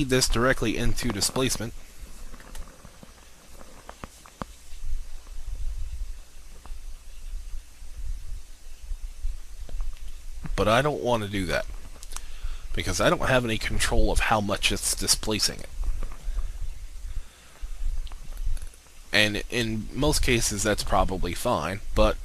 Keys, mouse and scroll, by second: 0.3 click, 5.1-5.5 scroll up 1, 22.1 click.